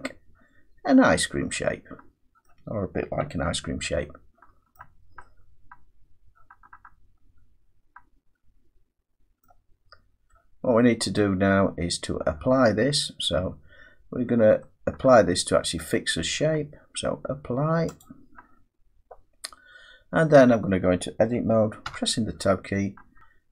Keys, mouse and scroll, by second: 0.8 scroll up 4, 1.8 scroll down 4, 2.4 middle click, 3.2 Tab, 3.7-4.4 scroll down 3, 4.8 middle click, 4.8 Tab, 9.4 middle click, 11.2 middle click, 15.7 middle click, 18.0 click, 21.8 Tab, 23.2 click.